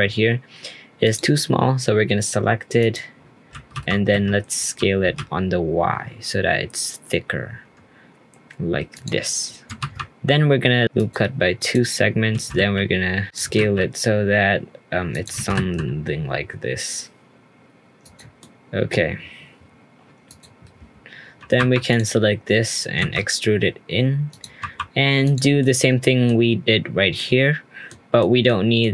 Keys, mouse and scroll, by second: 2.8 click, 18.4 middle click, 18.9-20.2 scroll down 3, 20.2 click, 20.6-21.4 scroll down 1, 21.4 2, 21.6 3, 21.9 click, 23.0 e, 24.6 2, 25.2 click, 25.6-27.9 middle drag, 27.9 scroll up 2, 28.2 middle click.